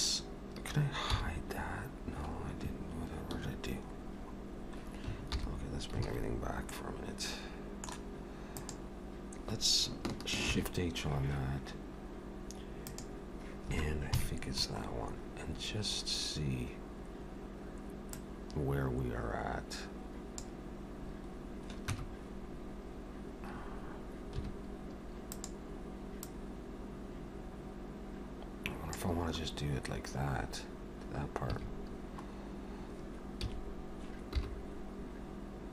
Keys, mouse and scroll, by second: 1.2 h, 4.0-5.0 scroll down 5, 5.4 alt+h, 6.7 middle click, 8.6 click, 10.5 shift+h, 12.9 click, 14.0 KP_3, 15.0-15.8 scroll up 6, 18.2 click, 21.1-21.6 scroll down 2, 21.6 scroll down 1, 21.9 Tab, 26.2 click, 26.2 2, 29.5-30.0 scroll up 1, 30.0-31.1 scroll up 4, 31.1-31.5 scroll down 1, 31.5 a, 32.4-33.0 scroll up 1, 33.5 s.